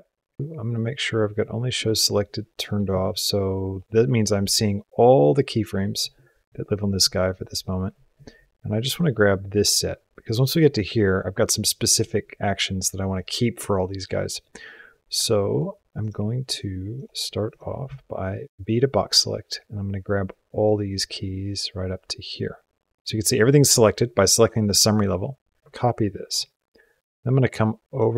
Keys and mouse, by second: 8.0-11.9 drag, 13.0-13.5 drag, 14.0-15.4 drag, 15.8 click, 16.8 click, 17.3 click, 17.7 b, 21.1-23.0 drag, 25.6 ctrl+c, 27.7 click.